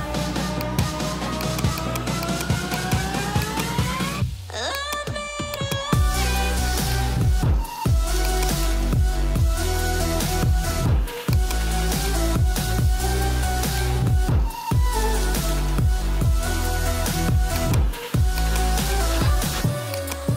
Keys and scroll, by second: 9.5 [, 19.4 ].